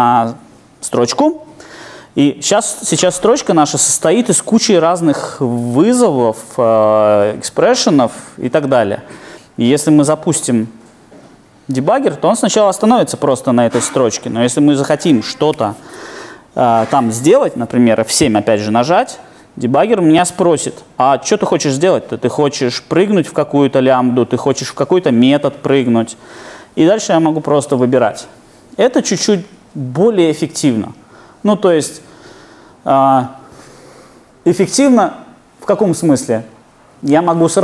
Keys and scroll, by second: 19.0 F7.